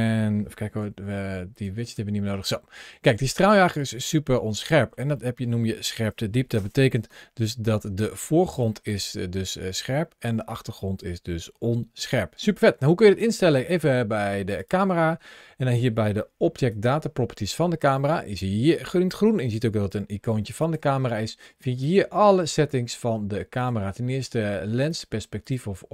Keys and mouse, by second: 0.6 t, 1.7 t, 4.0-4.7 middle drag, 5.0 shift+middle click, 5.6-6.0 middle drag, 7.6 ctrl+shift+a, 16.3 ctrl+shift+a, 21.6 click, 23.4 click, 24.7 click.